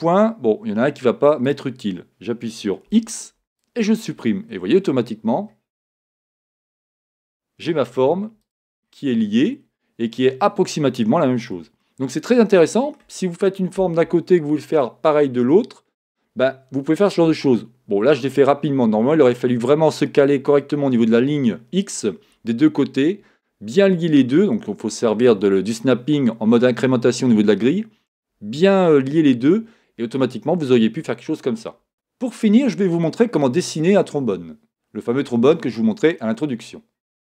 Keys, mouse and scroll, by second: 1.4 click, 2.9 x, 4.1-5.2 scroll down 2, 5.2-5.5 scroll up 2, 6.7 click, 8.8 scroll down 2, 11.8-37.3 shift+middle drag, 16.2-17.0 shift+scroll up 1.